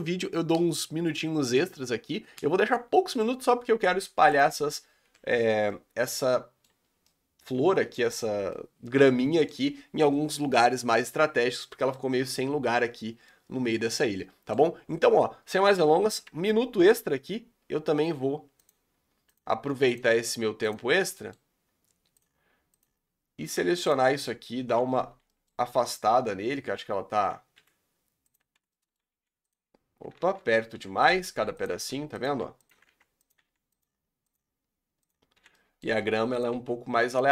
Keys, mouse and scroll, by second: 3.7 scroll up 4, 4.4 click, 5.0 KP_Decimal, 5.7-6.9 middle drag, 6.9 scroll down 4, 7.2-8.2 middle drag, 8.2-8.5 scroll down 4, 8.5-10.4 middle drag, 10.4-11.1 scroll down 8, 11.1-12.1 middle drag, 12.1-12.5 scroll up 6, 12.7 scroll down 5, 13.4-15.0 middle drag, 15.2 middle click, 15.4-15.8 scroll up 4, 16.3 Tab, 16.7-17.0 scroll up 5, 18.7 click, 19.3-19.6 drag, 19.8-20.9 drag, 21.3 middle click, 22.2 click, 22.8 click, 23.6 1, 23.9 click, 24.7 o, 25.3 scroll up 1, 25.4 middle click, 25.7 g, 28.3 click, 28.7 middle click, 29.2 g, 30.2 ctrl+z, 30.8-33.5 typing, 34.3 click, 35.1 click, 35.4 l, 35.6 middle click, 36.1 g, 36.7 r.